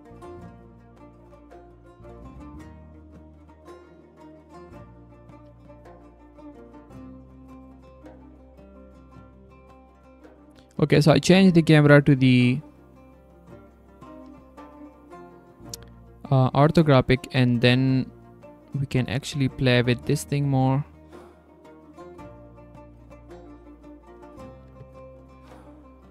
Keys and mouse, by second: 1.5 click, 1.8 click, 2.7 g, 5.4 g, 6.6-6.9 drag, 8.2 g, 8.9 g, 11.3-13.6 drag, 14.2 g, 18.2-21.1 drag, 21.7-24.3 drag, 24.6 r, 25.4 g.